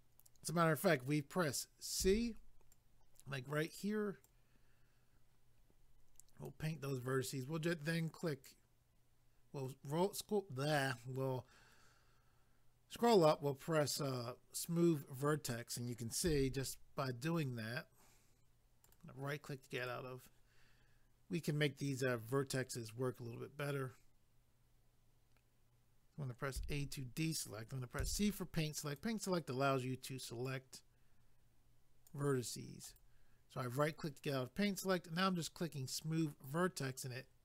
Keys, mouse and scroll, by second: 2.7 click, 4.2 click, 6.9 right click, 9.5-11.2 scroll up 1, 11.2 scroll up 1, 13.2 click, 16.6 click, 18.8 right click, 19.8 click, 26.6 a, 28.8 click, 30.5 click, 32.9 right click, 36.3 click.